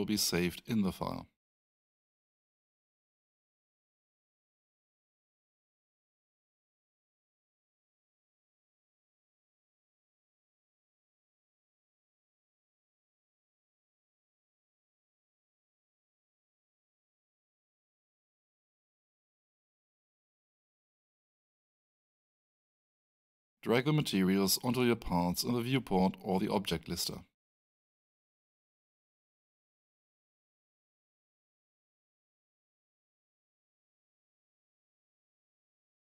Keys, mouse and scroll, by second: 4.4 ctrl+scroll down 1, 5.0 ctrl+click, 6.3 scroll down 1, 7.6 click, 8.9 Return, 18.1 click, 21.7 click, 30.7 click.